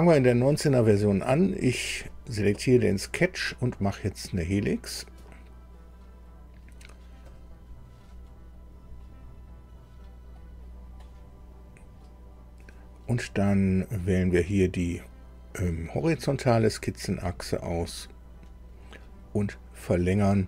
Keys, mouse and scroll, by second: 1.6 click, 7.3 click, 13.8 click, 16.6 click.